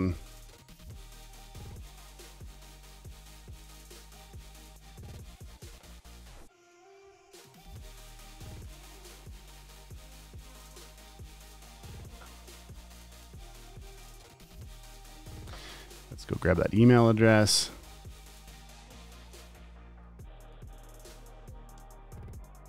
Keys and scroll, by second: 3.6 super+c, 7.5 t, 9.0 Return, 9.1 super+v, 10.1 super+a, 10.4 alt+super+Down, 14.0 v, 19.2 super+c, 20.5 t, 21.5 Return, 21.6 super+v.